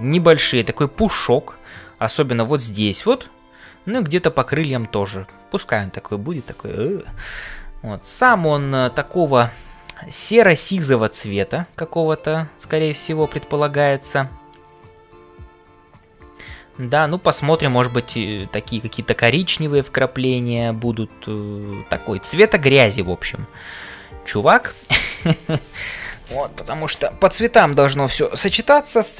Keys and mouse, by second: 9.7-17.8 middle drag.